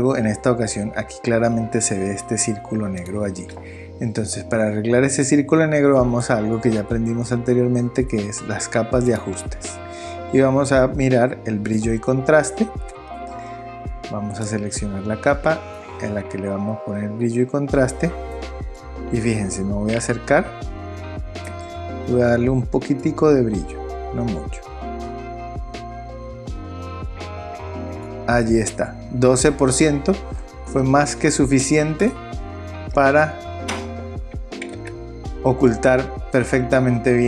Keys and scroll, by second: 34.7 super+0.